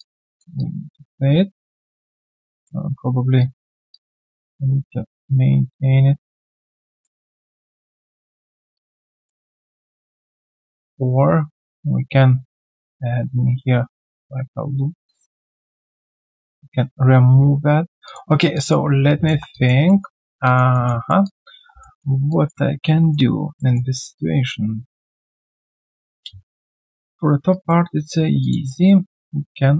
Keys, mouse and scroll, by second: 0.0 alt+click, 0.3 alt+click, 3.9 alt+click, 7.0 alt+middle click, 8.7 alt+click, 9.2 alt+middle click, 10.1 alt+click, 18.0 alt+click, 18.3 alt+right click, 18.5 alt+click, 19.0 right click, 19.3 1, 19.8 alt+right click, 20.0 alt+middle click, 20.3 alt+right click, 20.4 alt+click, 20.7 alt+middle click, 21.0 alt+right click, 21.2 alt+click, 21.7 q, 21.8 alt+middle click, 22.3 alt+click, 23.1 alt+middle click, 26.2-27.2 alt+scroll down 1, 27.5 alt+right click.